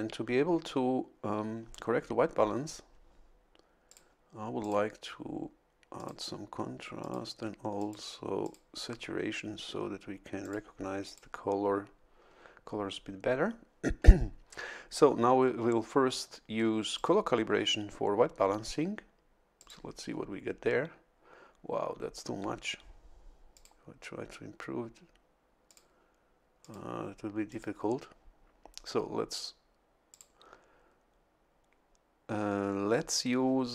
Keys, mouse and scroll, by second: 3.9 click, 4.6 click, 6.0 click, 7.0 click, 7.8 click, 8.4 click, 10.4 click, 11.0 click, 16.9-18.2 drag, 19.6 click, 23.5 click, 25.7 click, 26.6 click, 27.5 click, 30.1 click.